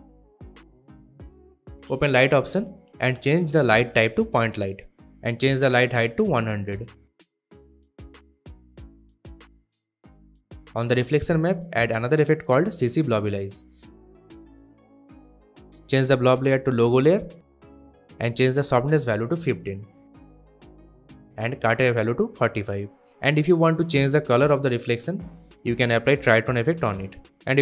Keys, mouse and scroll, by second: 0.4-1.7 drag, 4.3 click, 6.3-7.4 typing, 9.8 click, 12.2-13.7 typing, 14.3 click, 19.6-20.1 typing, 20.2 Return, 21.1 click, 21.3-22.2 typing, 23.0-24.1 drag, 24.9-26.0 typing, 27.2-27.6 drag.